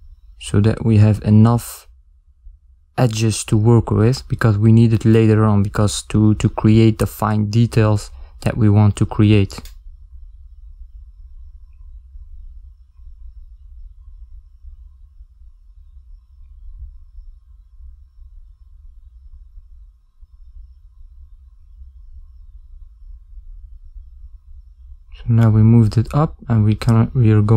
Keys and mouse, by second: 1.1 shift+middle click, 1.9 ctrl+middle click, 6.3 Tab, 7.3 ctrl+middle click, 9.4 Tab, 10.4 shift+middle click, 11.2 ctrl+middle click, 12.1 s, 15.5 shift+middle click, 16.2 ctrl+middle click, 16.9 shift+middle click, 20.5 click, 22.1 shift+z, 23.8 click, 26.3 shift+middle click, 27.2 ctrl+middle click.